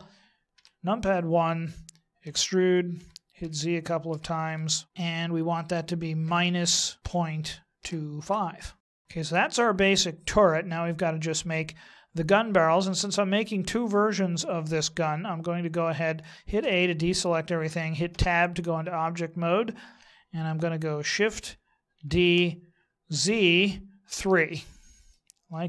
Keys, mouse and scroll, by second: 0.5 KP_1, 2.2 e, 8.8 middle click, 8.9 scroll down 4, 9.0 middle click, 16.6 a, 18.1 Tab, 21.9 shift+d.